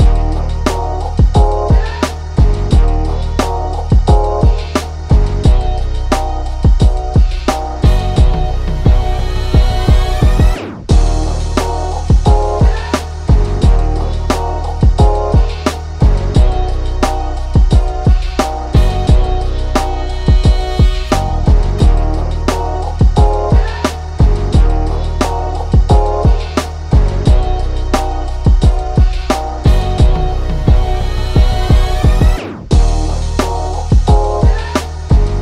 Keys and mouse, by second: 1.3 right click, 1.7 click, 3.9-8.3 drag, 11.4 shift+click, 11.5 shift+[, 11.7 ], 12.7 shift+[, 12.8 click, 15.2 click, 16.2 click, 17.5-20.1 drag, 20.1-22.6 drag, 22.6 ctrl+shift+[, 23.5 click, 24.9 click, 27.7-31.9 drag, 32.9 ctrl+shift+[, 33.9 click.